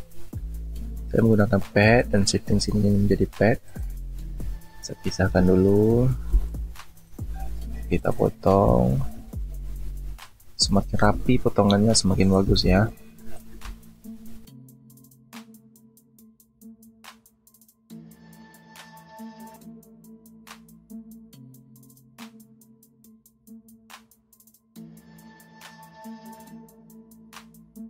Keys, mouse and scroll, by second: 5.5 alt+scroll up 1, 6.3 space, 9.0 alt+scroll up 1, 12.3 alt+click, 12.6 space, 15.1 alt+click, 15.2 space, 16.0 alt+click, 16.6 space, 17.4 space, 18.4 alt+click, 18.5 space, 19.5 alt+click, 20.1 alt+click, 20.2 space, 20.9 alt+click, 21.0 space, 21.7 alt+click, 21.8 space, 22.5 alt+click, 22.9 space, 23.5 alt+click, 24.0 alt+click, 25.6 alt+click, 25.7 space, 26.4 alt+click, 26.9 space, 27.2-27.5 alt+scroll up 1, 27.6 space.